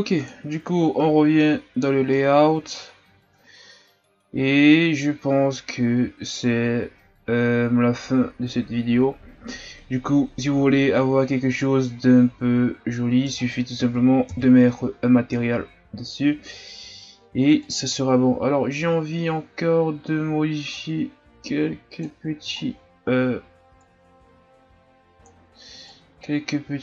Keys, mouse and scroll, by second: 0.3 click, 1.1 a, 1.6-2.1 scroll down 1, 2.1-5.3 middle drag, 14.3 KP_1, 15.4-16.8 scroll up 1, 16.8-17.8 shift+scroll up 4, 17.8 click, 20.7-22.6 drag, 22.6-23.1 shift+scroll down 3, 23.2 scroll up 1, 23.8-26.8 drag.